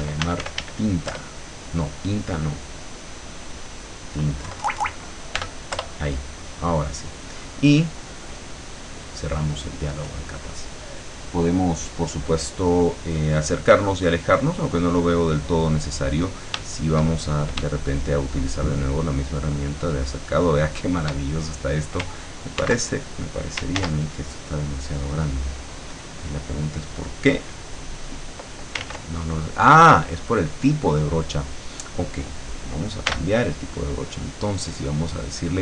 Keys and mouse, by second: 0.0-1.2 typing, 3.1 click, 4.5 BackSpace, 5.7 Return, 8.8 click, 18.9-21.2 shift+drag, 22.7 ctrl+x, 23.8 ctrl+z, 27.9 click, 28.9 ctrl+z, 33.1 b.